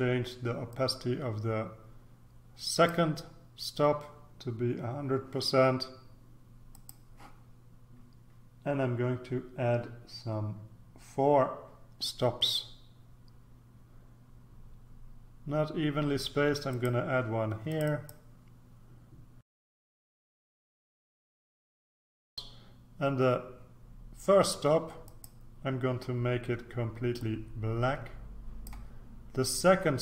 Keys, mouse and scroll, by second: 0.7-3.4 drag, 6.7 click, 16.7 click, 17.7 click, 19.5 click, 19.9 click, 20.4 click, 25.0 click, 27.1-29.2 drag.